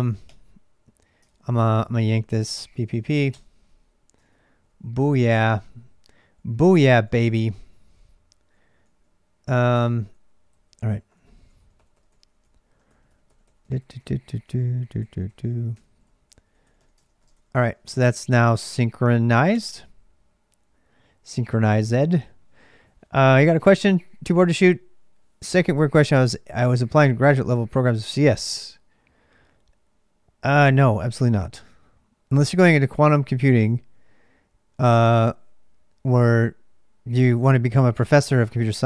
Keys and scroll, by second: 0.0-38.8 typing, 4.0 ctrl+[, 15.6 ctrl+[, 16.8 ctrl+[, 16.9 ctrl+j, 19.3 Return.